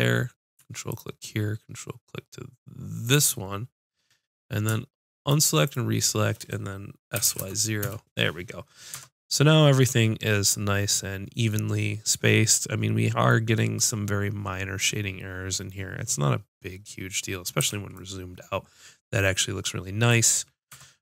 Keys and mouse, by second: 3.1-7.1 drag, 7.2 s, 9.0 Tab, 17.6 a, 20.7 Tab.